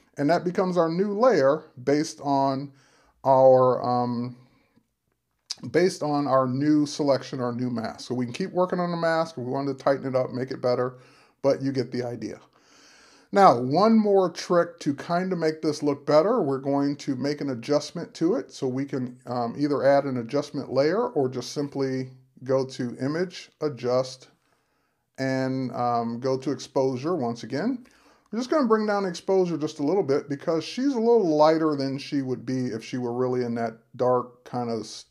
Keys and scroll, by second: 0.0 super+-.